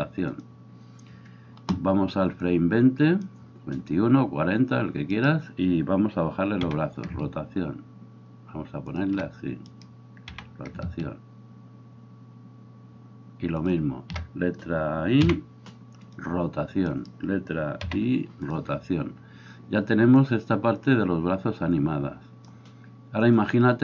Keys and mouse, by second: 5.2-6.6 middle drag, 5.2-6.6 right drag, 6.6 r, 9.0-20.8 middle drag, 9.7 right click, 10.3 r, 15.2 i, 16.9 right click, 17.9 i, 20.2-23.8 drag.